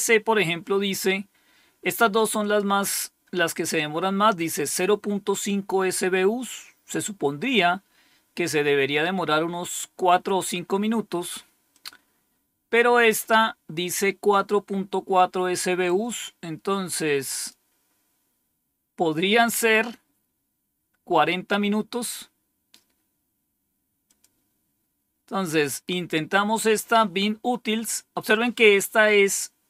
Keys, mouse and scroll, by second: 2.3 click, 11.6 click, 15.7-17.4 drag, 23.9 click, 27.5 click.